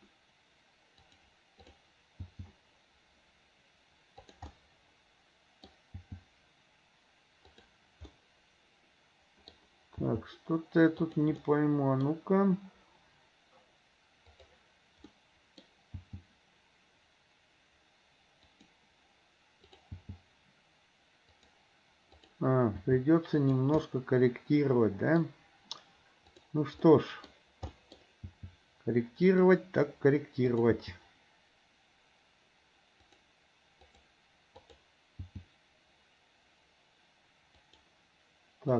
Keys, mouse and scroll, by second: 1.7 click, 2.4 g, 4.6-5.7 middle drag, 6.1 g, 8.2-9.6 middle drag, 10.1 g, 11.4-12.1 middle drag, 15.2 middle click, 16.1 g, 19.7 click, 20.1 g, 22.9 g, 23.8-25.3 middle drag, 26.4 click, 26.9-27.3 middle drag, 27.8 middle click, 28.4 g, 30.6 click, 30.9 g, 33.9 click, 34.6 click, 35.3 g.